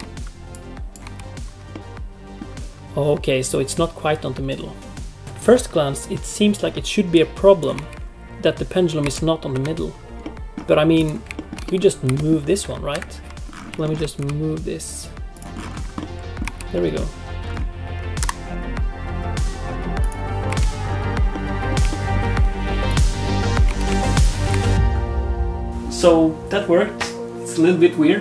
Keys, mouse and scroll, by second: 0.5 click, 1.0 space, 1.7 middle click, 5.2 space, 7.1 click, 7.7 space, 9.0 space, 9.5 KP_7, 10.2 middle click, 10.9 click, 11.3 shift+middle click, 11.6 middle click, 12.0 g, 13.3 click, 13.3 space, 13.3 KP_7, 13.4-13.8 scroll up 7, 13.8 shift+middle click, 14.1 g, 15.5-16.1 scroll down 11, 15.9 middle click, 16.4 space, 16.7 middle click, 17.3-18.0 scroll up 1, 18.2 shift+F5, 19.8 middle click, 19.8 scroll down 1, 19.8 space, 20.0 click, 20.4 space, 20.8 scroll up 1, 21.3 middle click, 21.9 shift+middle click, 22.8 click, 23.6 space, 24.1 shift+click, 24.4 space.